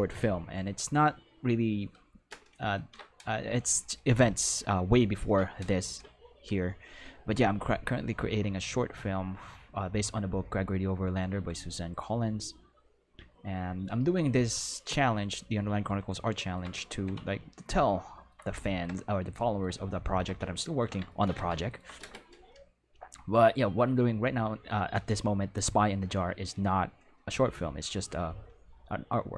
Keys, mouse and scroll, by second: 2.7 ctrl+Tab, 18.1 ctrl+middle click, 25.5 click.